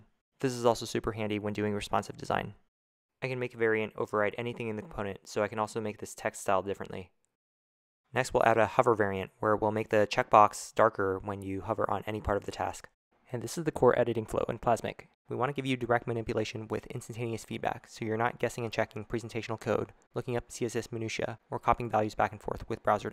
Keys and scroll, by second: 1.1 0.